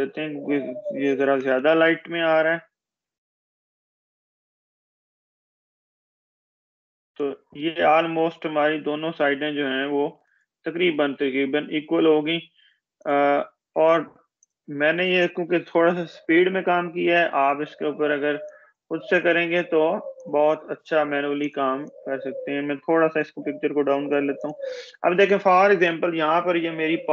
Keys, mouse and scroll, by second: 0.7-2.1 typing, 4.0 click, 10.3 click, 15.6 ctrl+-, 18.1 click, 19.1 ctrl+z, 20.7-25.5 drag, 22.0-25.5 drag, 26.1 ctrl+=.